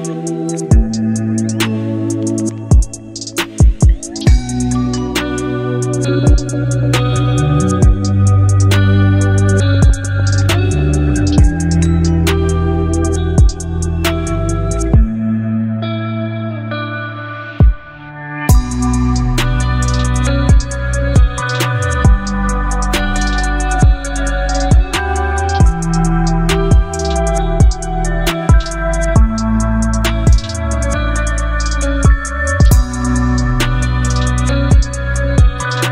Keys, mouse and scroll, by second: 1.7-2.2 click, 18.7 click, 24.1-25.5 alt+scroll up 2, 25.5-26.8 drag, 28.2 Left, 30.7 alt+BackSpace, 32.5 ctrl+d, 33.9 v, 34.9 alt+scroll down 3, 35.7 alt+scroll down 1.